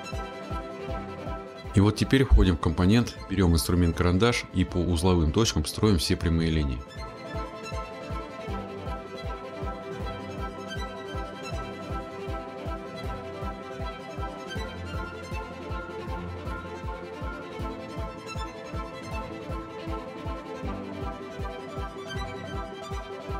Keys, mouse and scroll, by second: 2.0 click, 3.2 click, 3.4 click, 4.9 click, 5.8 scroll, 5.9 middle click, 7.5 middle click, 7.6 middle click, 7.8 scroll, 10.3 click, 10.5 click, 10.5-11.5 scroll, 11.9 click, 12.0-12.7 scroll, 13.1 click, 13.6 Escape, 13.8 scroll, 14.4 click, 15.0 click, 15.0-15.7 scroll, 15.8 click, 16.6 click, 16.6 scroll, 17.2 click, 18.0 scroll, 18.6 click, 18.7-19.8 scroll, 20.1 click, 20.2-21.5 scroll, 21.8 click, 22.7 click, 22.9-23.3 scroll.